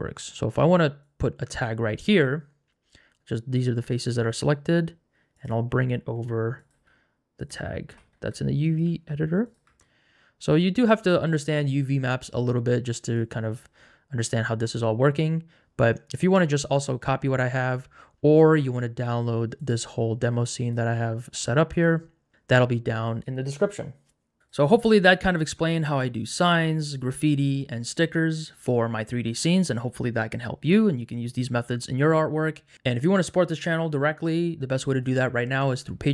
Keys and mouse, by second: 0.6 Tab, 1.0 click, 4.1 g, 6.2 s, 6.8 g, 8.1 s, 8.7 g, 9.7 Tab, 13.1 click, 19.9 click, 20.7 KP_0, 20.7 KP_Decimal, 21.9 click, 21.9 middle click, 24.8 l, 25.5 alt+2, 25.8 g, 26.3 alt+click, 27.5 g, 27.8 g, 28.5 3, 29.1 ctrl+shift+z, 29.3 x, 29.7 Tab, 30.1 Tab, 30.2 Tab, 30.8 Tab, 31.0 Tab, 32.4 Tab, 33.0 Tab, 33.0 Tab, 33.2 h, 33.8 Tab, 34.4 Tab, 34.6 Tab, 35.2 g, 35.2 shift+z, 35.3 right click, 35.5 right click, 35.8 3, 36.0 click.